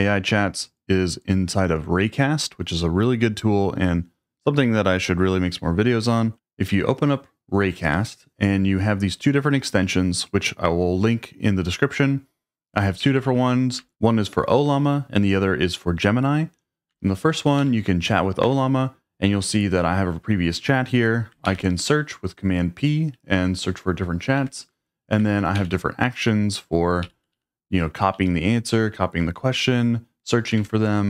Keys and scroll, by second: 6.3 alt+space, 13.0 Down, 13.2 Down, 17.6 Up, 18.4 Return, 21.5 super+p, 24.4 Escape, 25.6 super+k, 27.0 Down, 27.2 Down, 27.3 Down, 28.1 Up, 28.7 Up, 30.6 Escape.